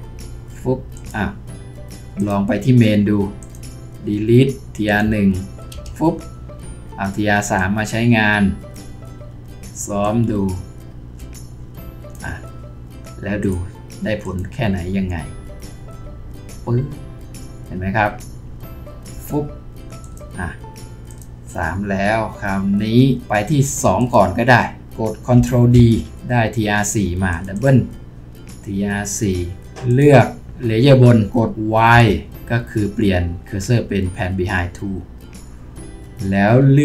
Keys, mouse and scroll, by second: 5.7 Delete, 25.7 ctrl+d, 27.5 double click, 31.9 y.